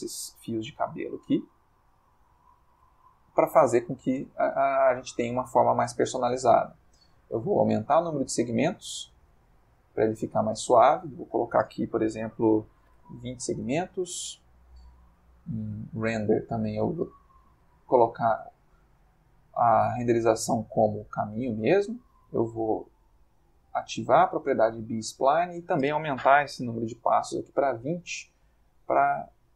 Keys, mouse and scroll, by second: 0.2 ctrl+Tab, 1.7 middle click, 3.0 click, 7.3-10.5 drag, 9.6 Escape, 11.1 click, 12.9 2, 15.0 middle click, 15.9 click, 16.5-17.1 middle drag, 23.7 click, 25.2 click, 26.7 2, 26.9 0, 27.3 Return, 28.9 middle click.